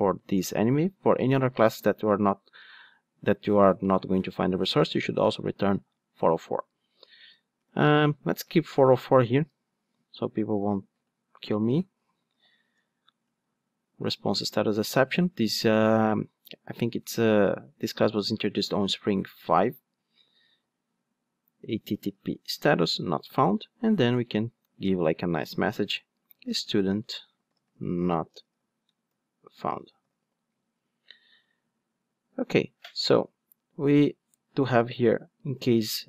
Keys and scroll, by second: 13.3 Return, 22.8 Return.